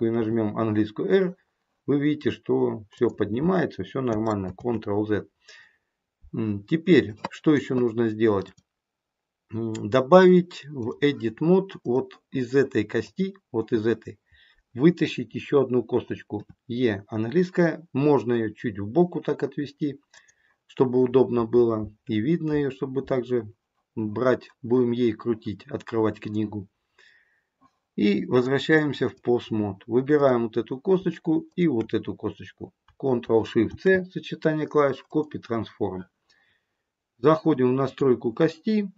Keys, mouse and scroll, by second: 0.2 r, 4.4 ctrl+z, 5.7-7.4 scroll up 2, 8.4 click, 11.7 click, 12.9 click, 28.3 click, 30.0 click, 31.5 shift+click, 33.6 ctrl+shift+c, 37.7 click.